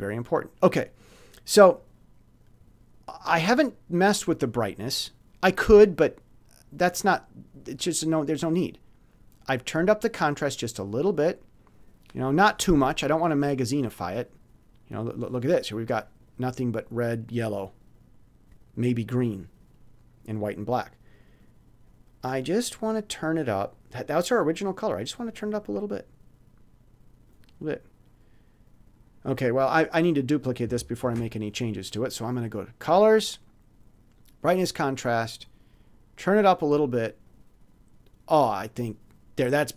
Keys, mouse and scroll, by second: 11.6 click, 13.7-15.3 drag, 21.3 click, 22.5 click, 25.2 click, 27.3 click, 29.2 click, 29.3 middle click, 30.2 click, 30.3 middle click, 31.0 ctrl+shift+d, 32.5 click, 34.1 click, 36.2 click, 37.2 click, 38.7 click.